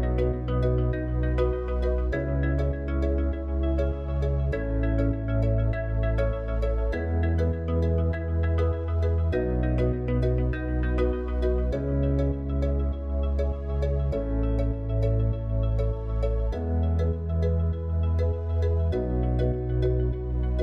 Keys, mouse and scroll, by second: 0.3 alt+click, 4.5 s, 10.3 Tab, 12.0 s, 16.2 click, 18.2 click, 19.2 click.